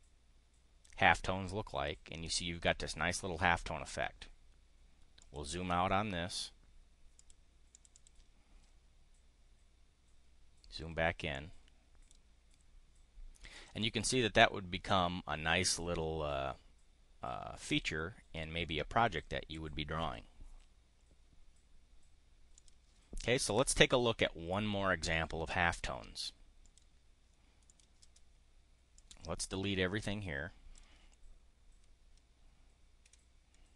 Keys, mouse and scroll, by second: 5.2 drag, 7.1 click, 7.7 click, 11.2 click, 13.5 click, 13.9-14.6 drag, 22.5 click, 23.4 click, 26.6 click, 27.6 click, 28.6-30.6 drag, 33.1 Delete.